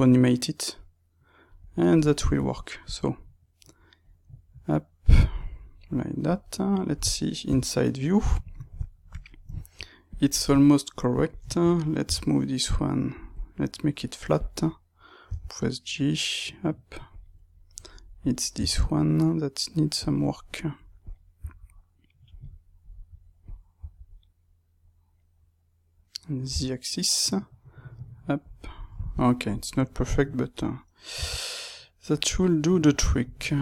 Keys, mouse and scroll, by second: 1.9 middle click, 2.8 click, 5.7-10.0 middle drag, 7.4 KP_3, 10.0-12.1 drag, 12.1 g, 13.1 click, 14.3 click, 15.2 g, 17.1 click, 18.1 click, 18.6 g, 20.0 click, 20.9 click, 21.4 g, 22.3 click, 23.4 click, 23.7 g, 28.5 click, 29.1 shift+middle click, 29.9 click, 31.1 g, 33.1 click.